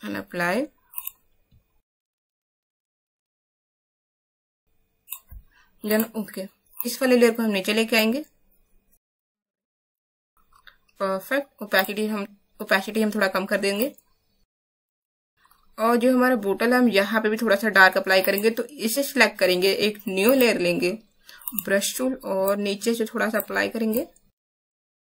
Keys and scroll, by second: 3.4 Down, 3.4 Down, 3.6 Down, 3.6 Right, 3.7 Up, 3.8 Up, 3.9 Up, 4.2 Down, 4.2 Down, 4.3 Right, 4.4 Right.